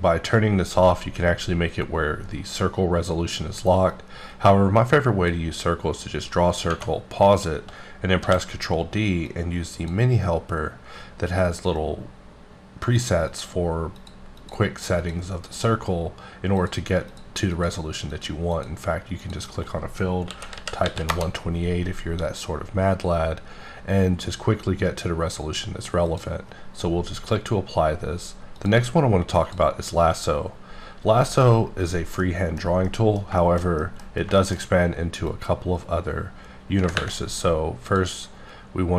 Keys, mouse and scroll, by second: 3.9-5.4 drag, 8.2 d, 9.3 click, 12.8 click, 13.3 click, 14.0 click, 14.4 click, 15.0 click, 15.5 click, 16.6 click, 17.5 click, 18.0 click, 19.4 click, 20.3 KP_1, 20.5 KP_2, 20.8 KP_8, 21.1 KP_Enter, 26.1 click, 28.7 click, 29.4 click, 32.2 middle click, 32.7 middle click, 33.4 middle click, 34.4 shift+middle click, 35.3 click, 37.9 click.